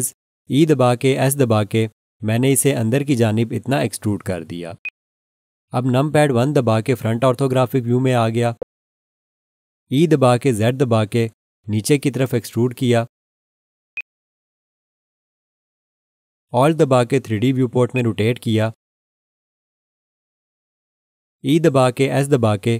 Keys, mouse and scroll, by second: 4.8 click, 7.0 1, 8.4 scroll down 1, 10.8 scroll down 1, 10.9 e, 11.3 z, 13.9 click, 17.9 alt+click, 22.0 e, 22.4 s.